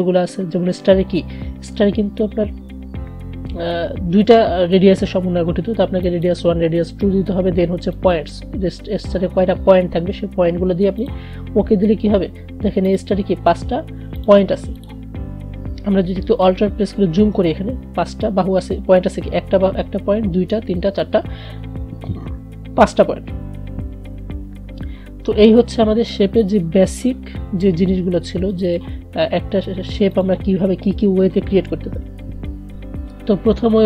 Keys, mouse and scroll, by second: 6.1 click, 11.1 click, 16.9-18.4 alt+scroll up 1, 23.6 alt+Num_Lock, 23.6 alt+scroll up 1, 23.7-24.8 alt+scroll down 1, 26.4 click.